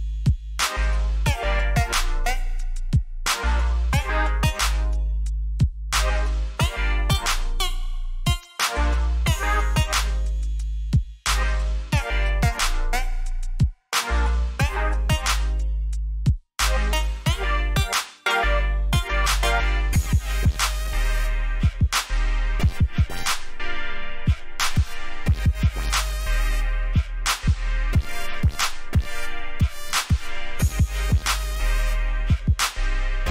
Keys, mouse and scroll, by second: 24.5-25.0 alt+scroll down 1, 25.5 scroll up 1, 26.0 ctrl+shift+d, 28.0 Escape, 28.6 click.